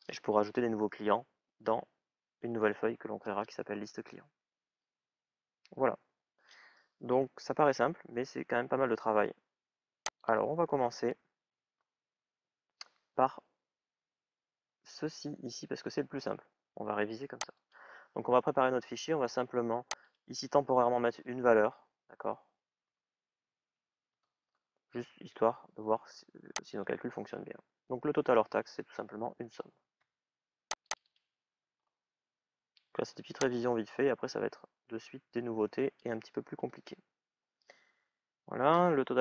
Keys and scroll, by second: 22.6 shift+", 23.2 shift+à, 23.9 Return, 36.4 Return.